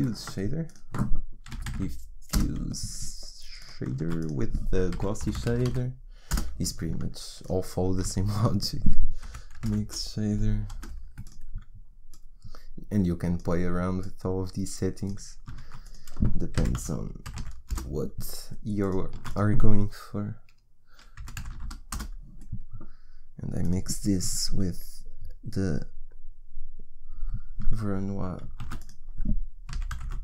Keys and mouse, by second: 0.0 shift+a, 3.9 shift+a, 5.6 s, 7.8 shift+a, 15.5 shift+a, 19.1 shift+a, 28.5 shift+a.